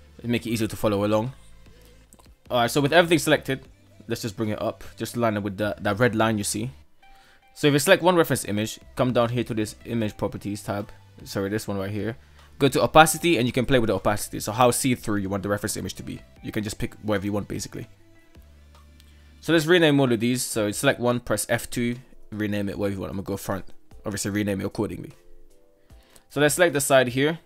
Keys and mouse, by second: 0.0 shift+middle click, 2.6 g, 5.9 right click, 10.8 click, 13.0 click, 14.2-16.9 drag, 17.2 click, 20.7 F2, 24.0 click, 24.6 click, 25.0 shift+middle click.